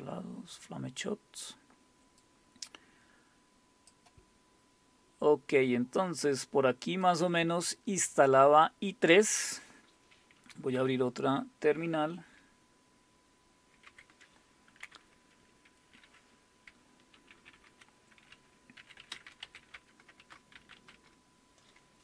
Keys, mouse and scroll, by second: 0.0-1.6 scroll down 2, 2.2-3.9 drag, 4.5-5.8 scroll up 3, 7.0 click, 10.8 super+Return, 13.9 super+w, 17.2 ctrl++, 17.4 ctrl++, 17.6 ctrl++, 18.6-21.0 typing, 20.2 Return.